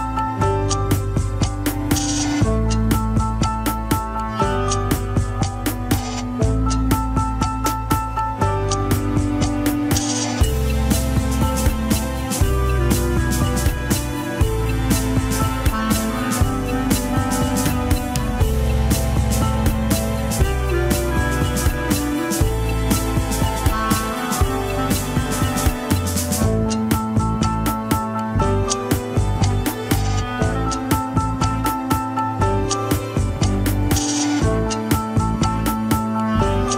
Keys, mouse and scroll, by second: 0.3 click, 0.6 g, 1.4 alt+z, 1.9 click, 2.2 alt+z, 2.5 g, 3.0 alt+z, 3.7 alt+z, 4.5 alt+z, 5.5 click, 6.1 g, 7.1 alt+z, 7.4 alt+z, 7.7 click, 8.0 g, 8.7 alt+z, 9.2 alt+z, 9.8 click, 10.0 alt+z, 10.3 g, 10.8 alt+z, 11.2 click, 11.8 alt+z, 12.2 g, 13.8 click, 14.4 g, 16.2 click, 16.6 g, 17.6 click, 17.9 g, 20.4 click, 20.7 alt+z, 20.9 alt+z, 21.4 shift+click, 22.2 s, 23.0-24.1 drag, 24.4 s, 26.3 click, 27.2 shift+click, 27.5 s, 29.5 click, 29.7 KP_3, 30.2 click, 31.1 KP_1, 31.3 scroll up 2, 31.6 g, 32.7 alt+z, 33.1 click, 33.2 alt+z, 33.5 g, 34.5 click, 34.8 KP_3, 35.4 click, 36.2 KP_1.